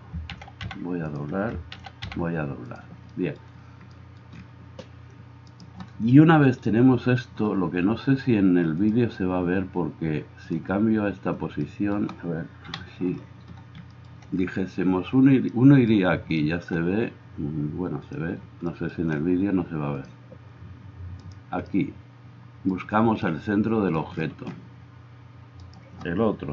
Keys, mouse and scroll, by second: 0.3 shift+d, 1.9 shift+d, 5.5-12.7 right drag, 12.7-21.3 drag, 12.7 KP_7, 21.3-25.9 right drag, 25.9-26.5 middle drag.